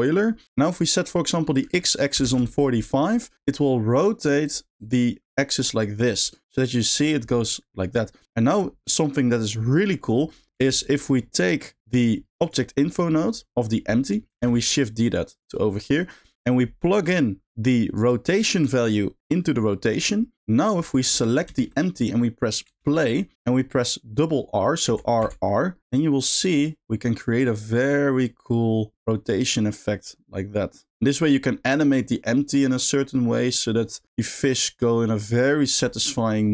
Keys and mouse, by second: 1.7 click, 3.0 middle click, 4.4 click, 4.8 click, 5.2 space, 5.7-6.2 middle drag, 6.9 middle click, 9.8 middle drag, 10.6 space, 11.0 middle click, 12.0 middle click, 12.4 drag, 14.0 middle click, 14.4 shift+d, 15.3 click, 15.7 middle click, 17.1 click, 18.1 click, 18.3-19.9 drag, 21.0 shift+middle click, 21.6 shift+middle click, 22.7 space, 23.4 middle click, 24.9 r, 36.2-36.5 middle drag.